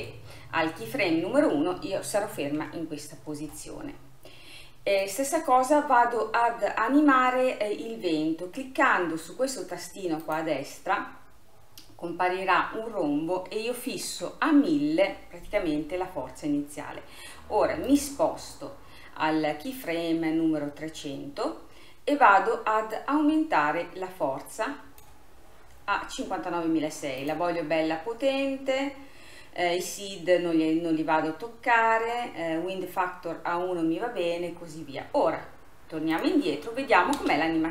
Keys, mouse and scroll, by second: 2.7 KP_1, 5.0 click, 10.3 click, 14.1 i, 17.9-21.0 drag, 23.0-26.0 drag, 27.3 click, 28.6-30.8 scroll down 1, 34.2-35.0 scroll down 2, 36.2-37.2 drag, 37.2 space.